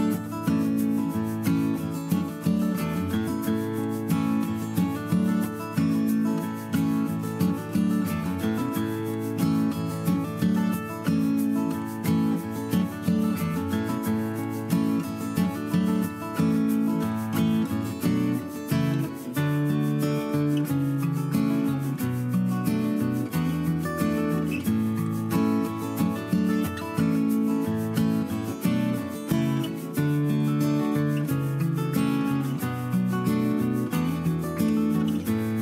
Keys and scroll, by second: 6.1 Left, 7.7 Up, 9.5 Up, 14.3 Up, 14.4 Left, 16.7 space, 22.7 Delete, 24.3 Delete, 24.6 ctrl+-, 27.4 Left, 27.8 Down, 28.0 Up, 28.3 Right, 28.4 Up, 28.5 Right, 28.6 Up, 31.2 Escape, 31.7 ctrl+=, 33.9 ctrl+c, 34.0 ctrl+v.